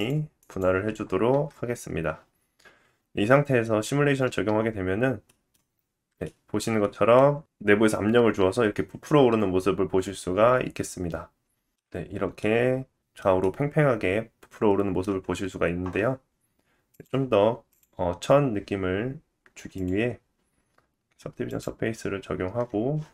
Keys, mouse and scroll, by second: 1.2 Tab, 4.2 space, 5.1 scroll down 1, 5.2 middle click, 5.5 space, 6.2 shift+middle click, 6.7 middle click, 7.2 scroll up 2, 7.5-8.1 shift+drag, 7.6 middle click, 8.1 middle click, 12.2-13.4 drag, 13.3 middle click, 15.2 scroll down 1, 16.8 click, 17.0 middle click, 17.6 click, 18.2-23.1 drag.